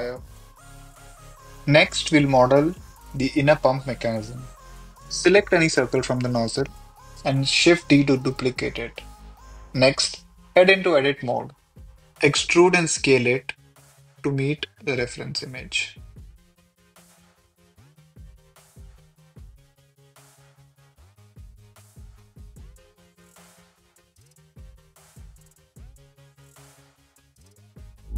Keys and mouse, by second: 1.2 click, 1.7 Tab, 2.2 Tab, 3.9 middle click, 5.4 h, 6.1 Tab, 6.4 click, 6.4 Tab, 6.8 alt+click, 7.4 shift+d, 8.0 Escape, 8.2 p, 8.6 s, 8.9 Tab, 9.5 click, 9.6 click, 10.4 s, 11.8 Tab, 12.1 Tab, 12.3 click, 12.6 p, 12.9 Tab, 13.1 a, 13.4 e, 13.4 z, 14.8-21.5 typing, 15.5 click, 15.8 click, 17.6 click, 19.2 click, 19.8 click, 21.2 Escape, 22.6 KP_1, 23.1 e, 23.5 z, 23.8 click, 23.9 e, 24.9 e, 26.1 click, 26.2 click, 26.4 g, 26.7 Escape, 26.8 click, 27.2 g, 27.7 click, 27.7 Tab.